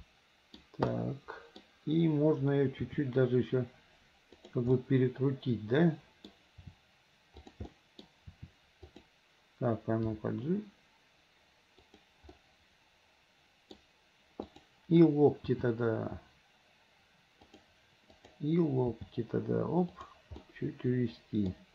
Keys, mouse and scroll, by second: 0.9 middle click, 2.9 r, 4.8-6.3 middle drag, 6.7 r, 7.7-8.1 middle drag, 8.9 r, 10.8 g, 12.4-13.9 middle drag, 14.5 click, 15.9 g, 18.2 click, 19.2 g, 20.4-21.7 middle drag.